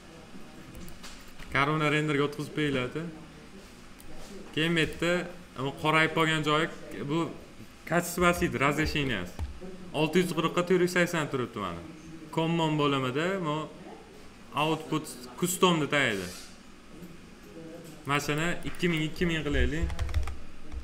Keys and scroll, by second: 19.5 2.